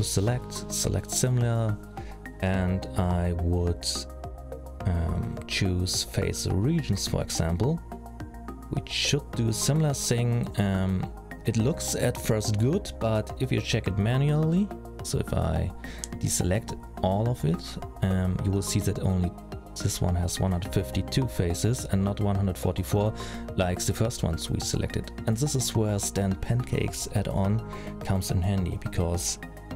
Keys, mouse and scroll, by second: 11.6-12.0 scroll down 4, 12.0 middle click, 12.8-13.3 scroll up 2, 13.3 scroll down 1, 13.4-13.9 scroll down 1, 13.9-14.8 scroll up 2, 15.4-15.8 scroll down 3, 15.8-16.4 scroll up 2, 16.4 middle click, 16.4-16.9 scroll up 1, 18.7 alt+a, 19.5 l.